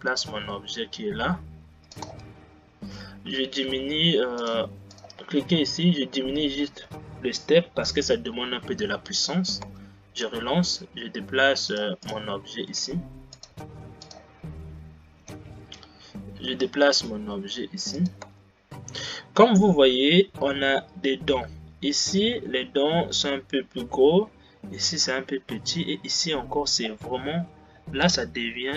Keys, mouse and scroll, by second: 2.2 space, 4.5 click, 5.1 click, 6.9-9.8 drag, 9.8 space, 10.4 g, 12.2 click, 12.9 g, 14.1 click, 15.3 g, 18.4 space, 27.4-28.7 scroll up 2.